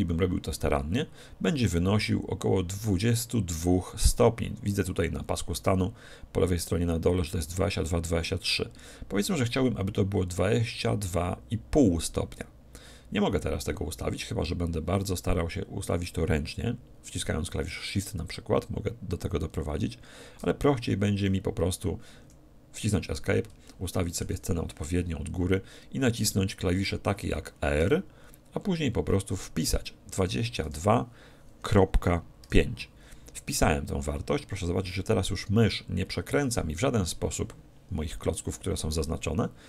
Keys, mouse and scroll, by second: 23.1-23.7 scroll down 1, 23.7-25.4 middle drag, 27.8 r.